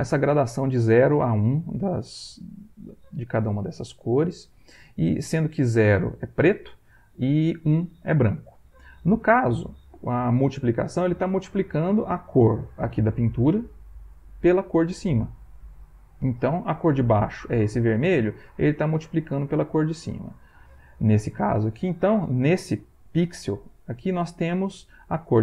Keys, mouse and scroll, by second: 12.9 click, 15.3 click, 17.0 click, 19.4 click, 20.8 middle click, 22.3-23.3 ctrl+middle drag.